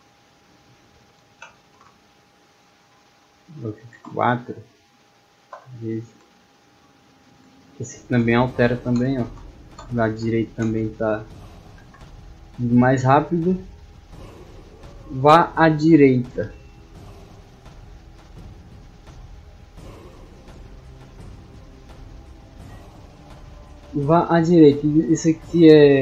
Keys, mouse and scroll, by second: 2.6 click, 5.7 d, 6.6 a, 7.6 d, 8.9 d, 9.7 d, 12.4-12.9 scroll down 2, 13.8-14.5 scroll down 4.